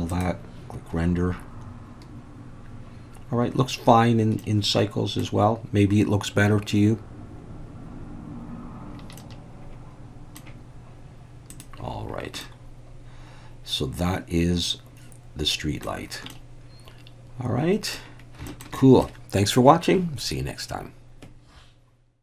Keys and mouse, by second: 0.1 click, 4.4-5.2 middle drag, 9.2-10.4 middle drag, 11.6 click, 12.4-15.9 middle drag, 16.3-18.0 middle drag, 18.5 shift+middle click, 18.8 middle click.